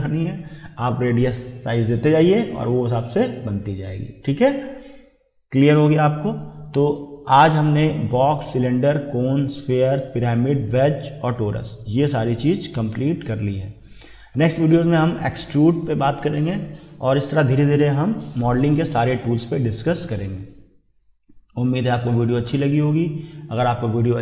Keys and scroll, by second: 17.2 Escape.